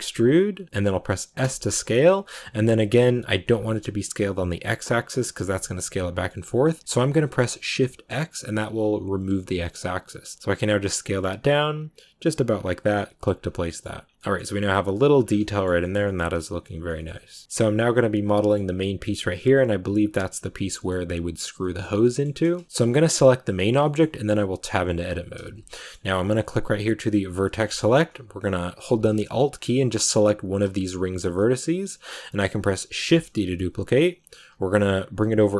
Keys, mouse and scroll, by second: 13.3 scroll down 1, 13.6 middle click, 13.7 scroll up 1, 13.8 a, 13.9 scroll down 1, 14.1 middle click, 14.5-15.1 scroll up 1, 15.1 scroll down 1, 15.3-16.8 middle drag, 16.8 scroll down 1, 16.9 shift+middle click, 17.2 scroll up 1, 17.4-20.0 middle drag, 20.0-20.7 scroll down 1, 20.7-22.6 middle drag, 22.6 Tab, 23.7 middle click, 24.5 Tab, 25.6-27.1 middle drag, 27.1 click, 27.6 shift+middle click, 27.7 shift+scroll up 3, 30.3 alt+right click, 31.3 middle click, 31.7-33.0 shift+scroll down 3, 33.0 shift+d.